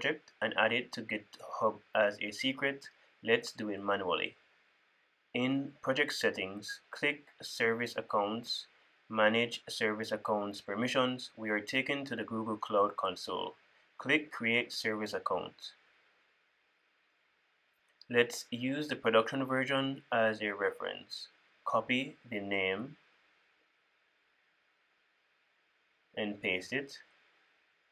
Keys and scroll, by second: 23.6 super+c, 26.6 super+v.